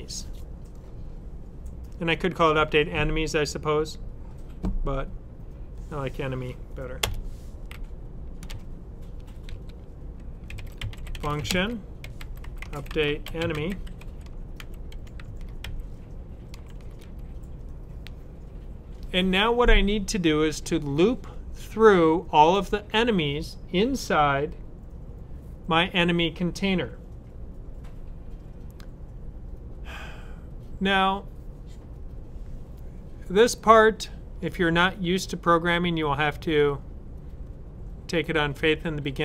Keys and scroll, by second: 9.3 Up, 10.1-16.6 typing, 18.9-19.7 typing.